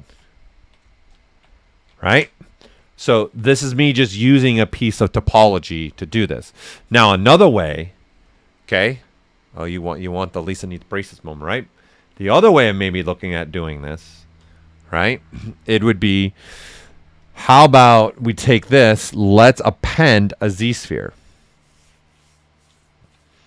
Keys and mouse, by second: 0.3 ctrl+right click, 0.8 right click, 1.2 alt+shift+right click, 1.9 ctrl+alt+right click, 17.2 click.